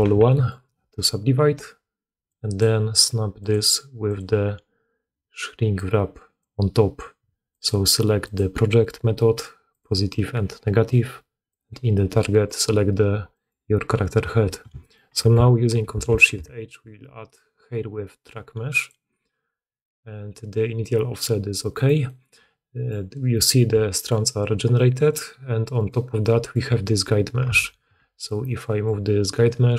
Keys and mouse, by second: 1.9 middle click, 2.3-3.4 drag, 3.4 middle click, 4.1 click, 6.2 click, 8.6-15.8 middle drag, 15.8 ctrl+shift+h, 15.8-21.8 ctrl+shift+drag, 22.1-24.7 drag, 24.7 middle click, 25.6 click, 25.8-28.3 middle drag, 27.3 Tab, 27.7 a, 28.3 click, 28.6-29.7 middle drag.